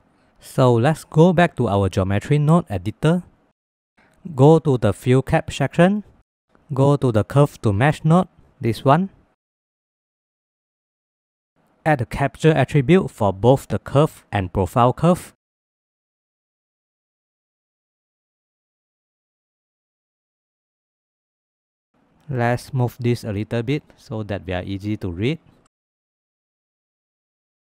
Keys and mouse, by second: 2.0 click, 3.5 middle click, 4.3 middle click, 4.7 middle click, 5.0 middle click, 5.6 middle click, 6.1 middle click, 7.5 middle click, 11.7 shift+a, 15.6 middle click, 16.1 click, 16.6 middle click, 17.1 click, 17.3 click, 17.9 shift+d, 18.8 click, 21.0 middle click, 21.4 middle click, 22.0 middle click, 22.8-23.4 shift+drag, 24.5 middle click, 24.9 middle click, 25.3 click, 26.0 middle click, 26.4 middle click, 26.9 middle click, 27.3 click.